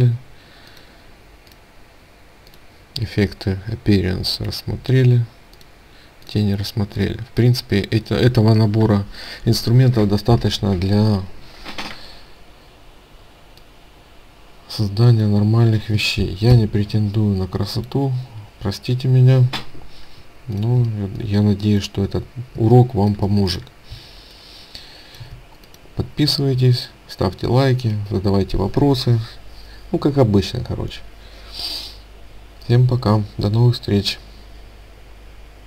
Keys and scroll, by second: 20.2 ctrl+space.